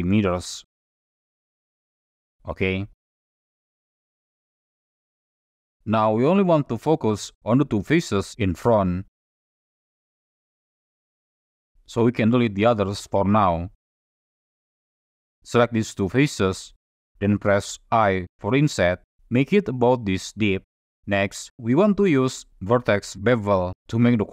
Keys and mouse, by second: 2.4-3.2 middle drag, 3.6 middle click, 4.2-4.7 shift+middle drag, 6.4 middle click, 7.0 3, 7.4 shift+middle click, 8.7 click, 9.3 shift+click, 9.8-11.1 middle drag, 11.1 click, 12.1 ctrl+i, 12.4 x, 14.7 middle click, 15.7 click, 16.2 shift+click, 18.1 i, 20.7 click, 22.2 shift+click.